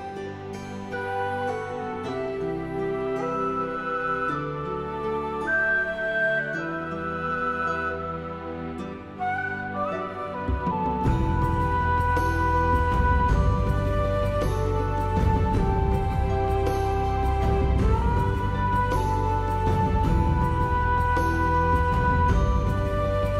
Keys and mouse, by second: 0.0 shift+click, 0.3 shift+click, 0.6 shift+click, 1.4 shift+right click, 1.6 r, 2.0 right click, 2.7 click, 3.3 r, 4.6 click, 4.7 s, 5.1 click, 5.3 middle click, 5.6 alt+middle click, 5.7 alt+middle click, 5.9 alt+z, 6.6 ctrl+z, 7.0 alt+click, 7.2 alt+click, 7.5 s, 7.9 click, 8.1 g, 8.4 click, 8.7 click, 9.2 alt+z, 9.5 shift+click, 9.9 alt+middle click, 10.0 alt+middle click, 10.3 g, 10.6 click, 10.9 shift+middle click, 11.1 middle click, 11.6 g, 11.9 click, 12.1 middle click, 12.4 middle click, 12.6 middle click, 12.8 middle click, 13.0 middle click, 13.1 middle click, 13.7 alt+z, 13.7 middle click, 14.1 middle click, 14.4 click, 14.8 middle click, 15.3 alt+z, 15.4 middle click, 15.6 g, 16.4 click, 16.5 middle click, 17.0 click, 17.1 alt+click, 17.4 shift+middle click, 17.6 alt+z, 17.8 shift+middle click, 18.1 click, 18.5 s, 18.8 right click, 19.6 shift+right click, 20.2 alt+middle click, 20.7 middle click, 21.0 alt+z, 21.5 click, 21.6 click, 22.2 ctrl+z, 22.4 s, 22.8 click, 22.9 alt+middle click.